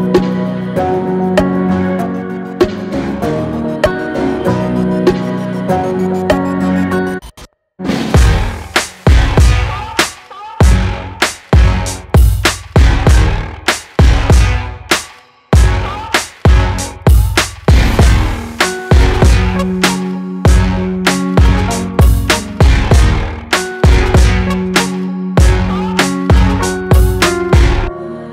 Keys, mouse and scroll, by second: 0.2 ctrl+c, 0.5 ctrl+f, 2.0-8.8 drag, 9.0 i, 9.4 click, 12.7-13.2 typing, 15.0 v, 16.3 click, 18.7 click, 25.0 click.